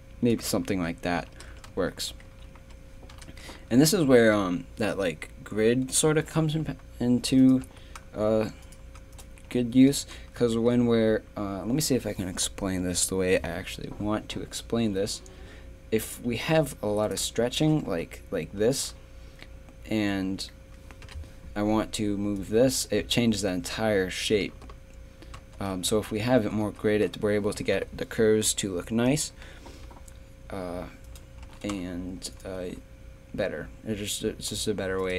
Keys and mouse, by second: 0.7 click, 0.8 middle click, 0.9 click, 1.5 Tab, 1.7 z, 2.3 z, 3.1 KP_3, 3.3 Tab, 3.7 a, 7.6 g, 9.5 g, 10.8 a, 14.3-17.0 middle drag, 17.0-18.9 right drag, 17.9 g, 21.0 KP_7, 25.4 ctrl+z, 25.8 a, 26.4 ctrl+z, 26.6 ctrl+z, 27.6 a, 27.7 KP_3, 31.1 right click, 31.3 click, 31.4-34.6 right drag, 31.4 g, 35.0-35.1 right drag.